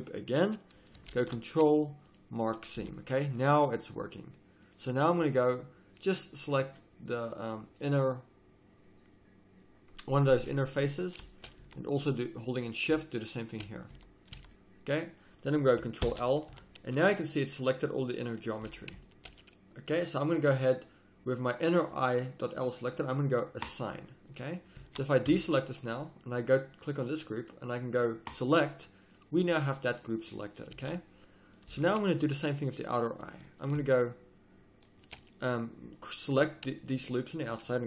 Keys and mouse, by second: 1.1 ctrl+e, 2.8 a, 10.4 z, 11.6 z, 14.3 z, 15.0 middle click, 16.0 ctrl+l, 16.5 z, 18.6 z, 21.9-25.6 drag, 24.8 z, 25.2 a, 26.9-28.8 drag, 28.8 middle click, 28.8 click, 29.0 middle click, 29.4 click, 29.7 middle click, 29.8 click, 30.7 z, 31.7 a, 32.9-34.9 drag, 33.9-35.3 right drag, 35.4-37.8 middle drag.